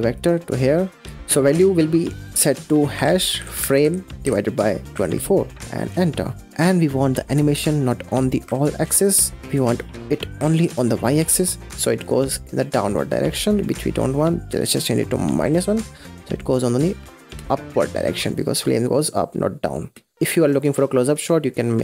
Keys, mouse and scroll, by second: 0.0 click, 0.8 middle click, 1.5-4.4 drag, 6.3 scroll down 1, 6.5 middle click, 7.1 scroll up 4, 7.7-9.3 drag, 9.4-11.3 drag, 11.3 space, 14.1 space, 14.5-17.2 drag, 17.2 space, 19.8 space, 20.0-20.6 scroll down 9, 20.1 drag, 20.6 scroll up 1, 20.7 middle click, 21.6-21.8 drag.